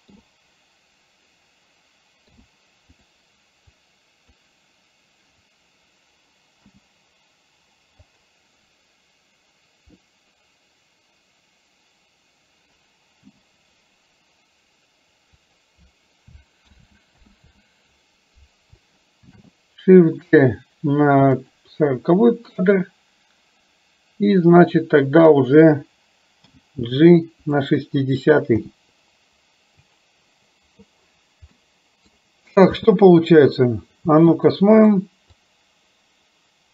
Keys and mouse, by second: 0.1 i, 2.3 i, 3.8 click, 6.7 g, 13.3 g, 16.7 ctrl+z, 17.3 ctrl+z, 19.4 shift+d, 24.5 click, 26.5 g, 28.7 g, 31.6 middle click, 32.8 space, 34.1 space, 34.8 click, 35.6-36.7 drag.